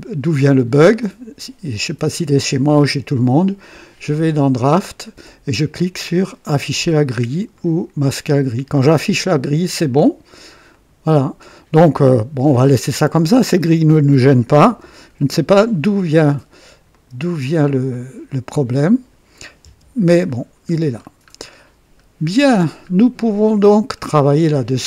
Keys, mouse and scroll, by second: 0.9 click, 4.1 click, 6.5 click, 7.5 click, 10.6 click, 11.8-13.7 drag, 14.6 KP_2, 15.1 KP_1, 16.8 click, 17.9-19.3 drag, 19.6 KP_3, 20.3 scroll down 1, 20.9-21.3 scroll up 1, 21.7 scroll up 1, 22.5-22.8 scroll down 1, 23.0-23.7 right drag, 23.7 scroll down 1.